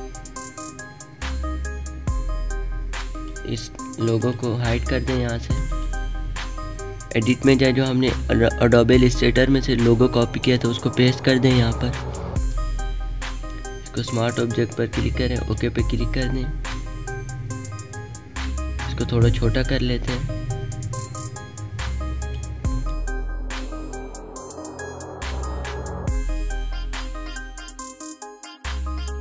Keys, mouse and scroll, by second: 2.8 click, 2.9 click, 16.3 click, 18.5-27.1 drag, 27.6 space, 27.7 click, 27.9 space.